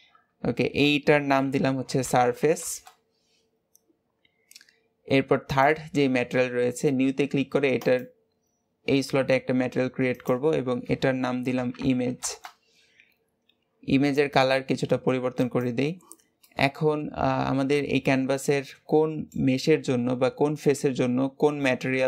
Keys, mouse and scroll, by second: 5.4 click, 7.7-13.2 drag, 14.0 click, 16.4-19.4 middle drag.